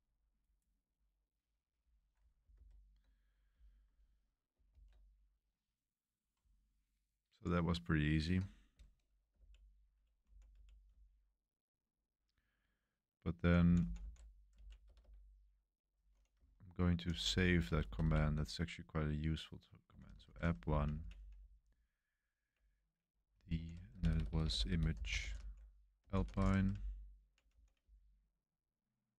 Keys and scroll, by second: 2.5 super+3, 4.7 ctrl+c, 9.3 Up, 9.8 Up, 10.2 Left, 10.5 Up, 10.9 Left, 11.4 Left, 11.4 Left, 11.5 Left, 11.6 Left, 12.2 Left, 12.6-13.2 Left, 13.6 Left, 13.8 Left, 14.5 Right, 14.8 BackSpace, 15.0 BackSpace, 16.3-18.0 typing, 19.6-22.5 typing, 23.3 Left, 23.5 Left, 23.9-29.1 typing.